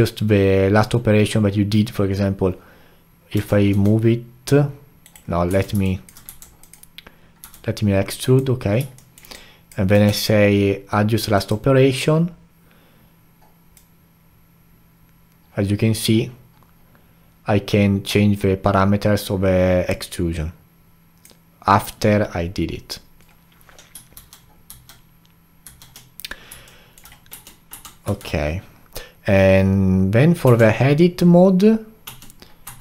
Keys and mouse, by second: 3.3 g, 5.5 Tab, 5.8 alt+click, 6.3 3, 6.6 click, 7.4 e, 9.0-9.4 alt+middle drag, 9.4-10.1 alt+drag, 10.1 q, 24.1 ctrl+z, 24.7 ctrl+z, 25.6 ctrl+z, 26.7-27.3 alt+middle drag, 27.3 Tab, 27.7 Tab, 28.0 q, 30.4 Tab, 32.1 Tab, 32.7 Tab.